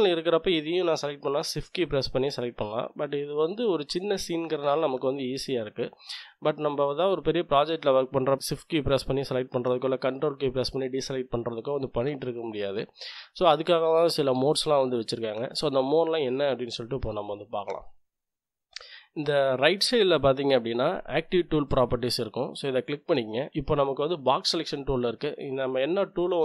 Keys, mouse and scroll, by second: 1.5 shift+click, 18.8 click, 22.0 click.